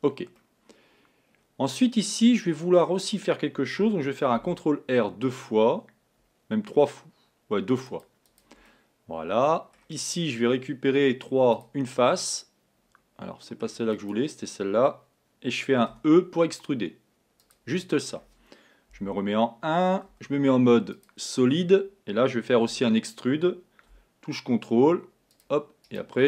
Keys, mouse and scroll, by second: 0.4-3.4 middle drag, 4.3 ctrl+r, 8.7-10.0 middle drag, 10.0-11.0 scroll up 2, 11.0 3, 11.6 click, 12.1-14.0 middle drag, 14.0 click, 15.9 e, 17.8-18.9 middle drag, 18.9 KP_1, 20.1 z, 25.9 right click.